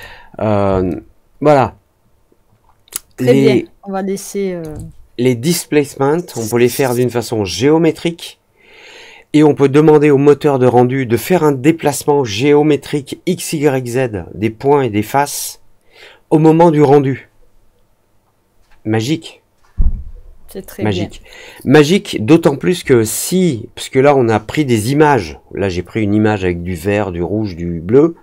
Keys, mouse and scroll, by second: 0.8-4.5 alt+drag.